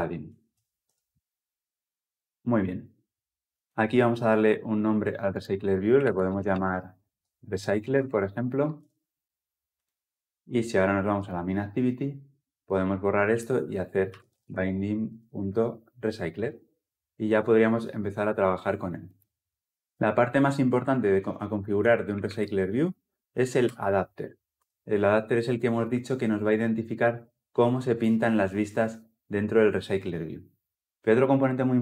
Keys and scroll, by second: 3.6 ctrl+alt+Left, 16.1 Return, 19.6 ctrl+z, 23.4 Return.